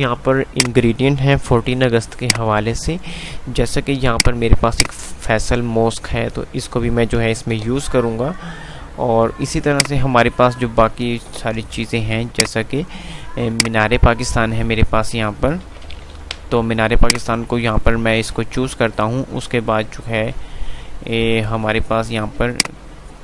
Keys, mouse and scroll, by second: 1.8 ctrl+u, 2.3-7.8 drag, 7.8 Page_Up, 9.5-11.4 alt+drag, 11.4 shift+Page_Up, 12.5-15.9 drag, 15.9 z, 16.3 Delete, 17.0-21.9 drag, 18.1 click, 22.3-23.2 drag.